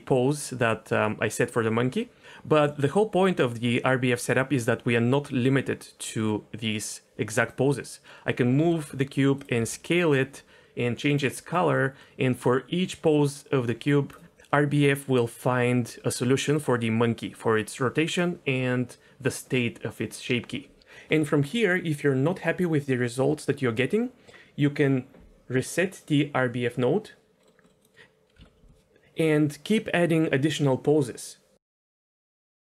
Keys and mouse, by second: 3.1 g, 8.6 g, 9.6 s, 10.0 click, 25.9 click, 27.4 middle click, 27.7 middle click, 27.8 click, 28.4 alt+s, 31.8 middle click, 32.1 middle click, 32.6 middle click.